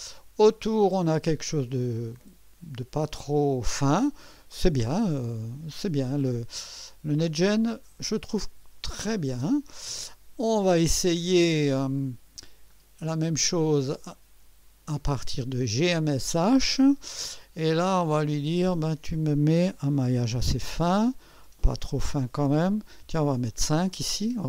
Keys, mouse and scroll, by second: 1.5-1.8 scroll down 1, 2.1-5.4 drag, 8.9 click, 9.9 space, 12.7 click, 14.0 click, 15.8 click, 18.3 click, 23.0 5.